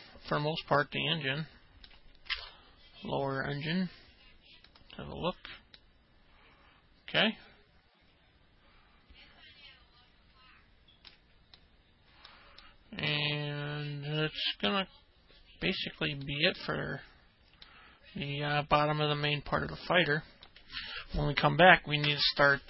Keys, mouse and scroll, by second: 0.0-2.8 alt+middle drag, 6.8-12.1 alt+middle drag, 11.7-12.1 alt+scroll up 1, 12.6 middle click, 13.7-17.4 alt+middle drag, 18.7-20.8 alt+middle drag, 21.2 middle click.